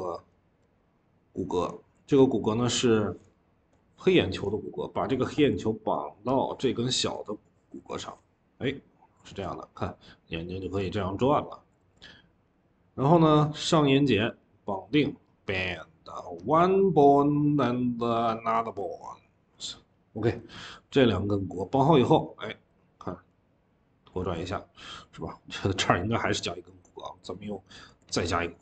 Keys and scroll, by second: 7.0 Escape, 7.6 v, 7.8 v, 9.1 ctrl+z, 11.6 ctrl+z, 13.1 ctrl+z, 19.3 Escape, 21.2 Escape, 24.1 ctrl+z.